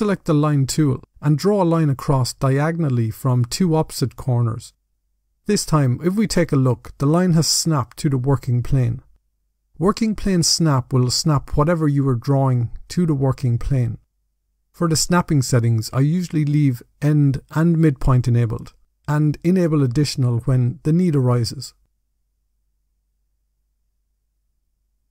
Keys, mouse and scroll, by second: 0.1 click, 1.7 click, 4.1 click, 4.7 scroll down 3, 5.0 middle click, 7.5 scroll down 3, 7.7 middle click, 10.1-11.9 scroll up 4, 17.3 click, 18.6 click.